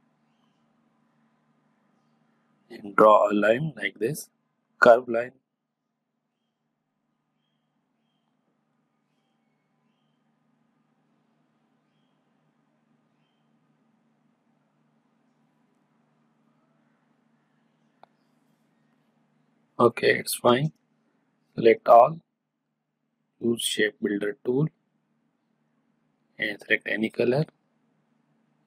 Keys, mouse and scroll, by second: 10.5-18.0 drag, 20.4-28.6 drag.